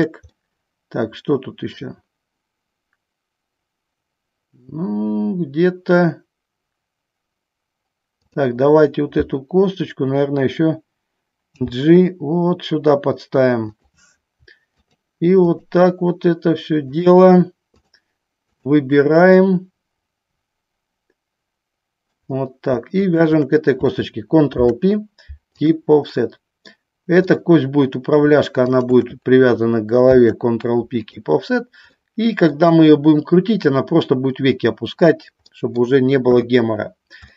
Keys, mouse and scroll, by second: 0.5-1.8 middle drag, 11.6 g, 13.9 click, 14.9 shift+click, 15.6 shift+click, 17.0 shift+click, 17.9 shift+click, 19.6-22.4 middle drag, 23.2 shift+click, 24.7 ctrl+p, 26.4 middle click, 27.4 click, 30.2 ctrl+p, 32.1 middle click, 35.6 middle click, 36.5 KP_3.